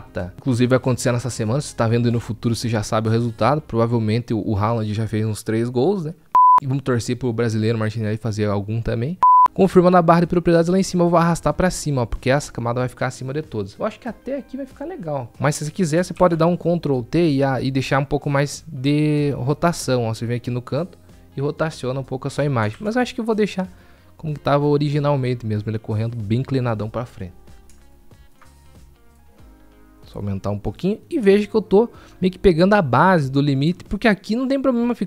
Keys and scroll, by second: 17.6 ctrl+t, 21.3 ctrl+t.